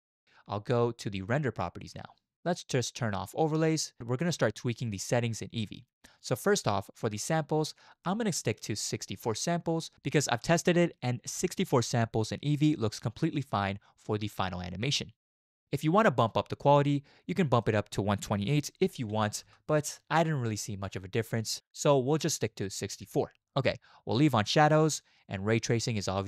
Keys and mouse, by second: 1.9 click, 3.6 click, 17.7-19.6 drag, 21.5-23.4 drag.